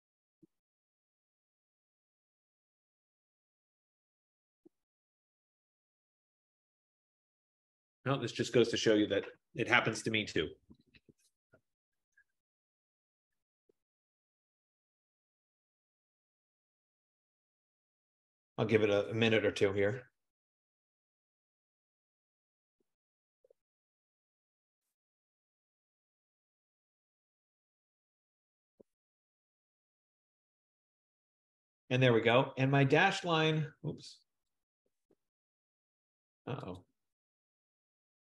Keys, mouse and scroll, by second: 2.0 F15, 34.9 click, 36.9 click.